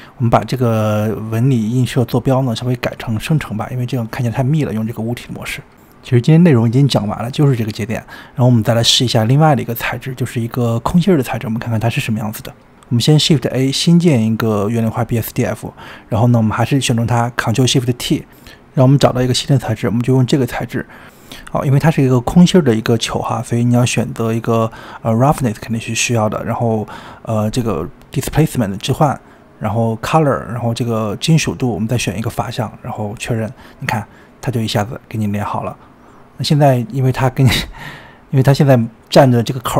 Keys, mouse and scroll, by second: 0.0-1.1 shift+middle drag, 1.1 click, 1.6 click, 2.2-4.0 scroll up 21, 4.0 drag, 6.0-7.2 middle drag, 7.2-7.7 scroll down 12, 8.1-8.8 shift+middle drag, 8.8-9.5 scroll down 5, 9.5 shift+middle click, 10.3 click, 10.4-11.2 scroll up 12, 11.2 click, 12.0 shift+a, 15.8-16.5 scroll up 5, 16.5 click, 17.9 ctrl+shift+t, 33.7-35.7 scroll down 7, 35.7 scroll down 3, 37.1-39.6 shift+middle drag, 39.6 drag.